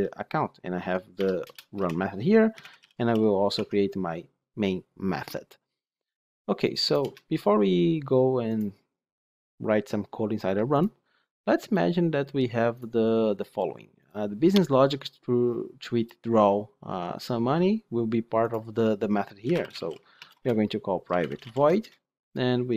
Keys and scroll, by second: 3.5 Tab, 7.0 Tab.